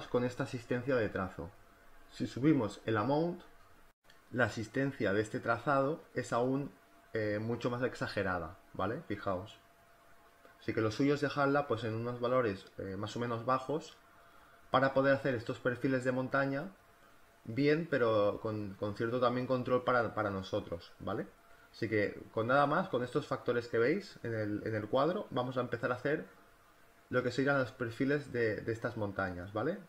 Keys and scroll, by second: 4.9 space, 14.4 ctrl+z, 15.0 ctrl+alt+z, 20.5 space, 25.6 ctrl+z.